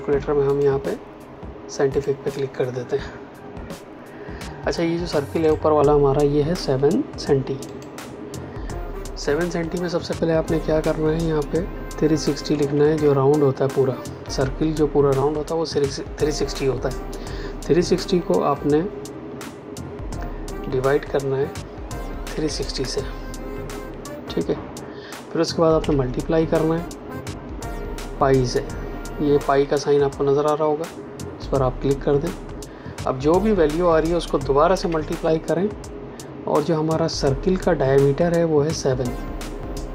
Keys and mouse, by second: 5.4 click, 12.3 KP_3, 20.5 KP_Divide, 22.2 KP_3, 22.7 KP_0, 25.7 KP_Multiply, 31.4 click, 34.7 KP_Multiply.